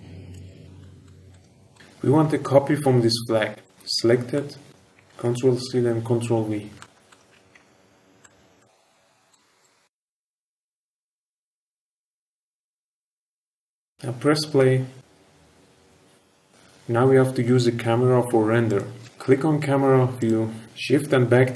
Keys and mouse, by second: 0.7 shift+middle click, 1.0 middle click, 1.3 shift+middle click, 1.7 shift+middle click, 3.6 shift+click, 4.3-4.7 shift+middle drag, 4.9 ctrl+c, 5.1 ctrl+v, 6.7 shift+middle drag, 7.0 shift+middle drag, 7.3 g, 7.5 shift+z, 8.5 click, 8.8 click, 9.6 click, 10.5 click, 14.4 space, 18.6 click, 20.1 click.